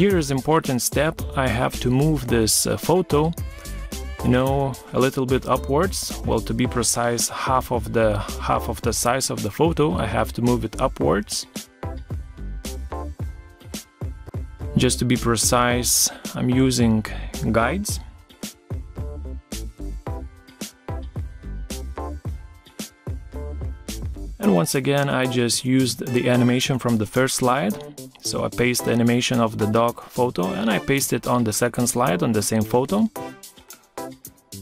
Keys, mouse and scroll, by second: 1.8 shift+click, 6.1 ctrl+z, 6.7 ctrl+z, 12.3 shift+click, 14.0 shift+click.